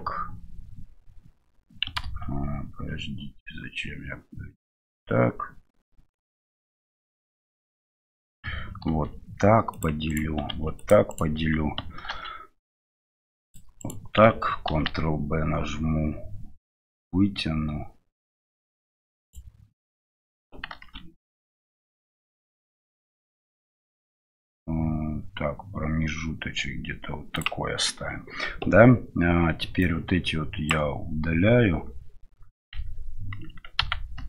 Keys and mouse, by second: 2.0 ctrl+z, 8.8 ctrl+r, 29.9-31.0 drag.